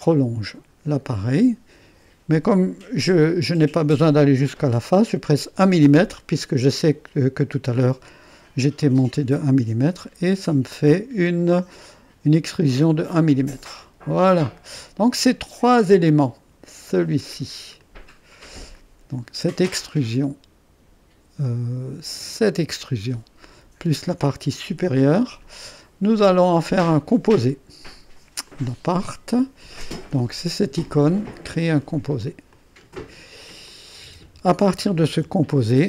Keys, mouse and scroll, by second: 0.0-1.1 drag, 5.3-6.0 typing, 9.1 Return, 10.7-12.0 drag, 13.4-16.8 drag, 17.2 click, 18.6 click, 19.0 click, 22.2 click, 24.7 click, 26.7 click, 28.4-32.1 drag, 32.5-34.5 drag, 34.7-35.6 typing, 35.6-35.8 drag.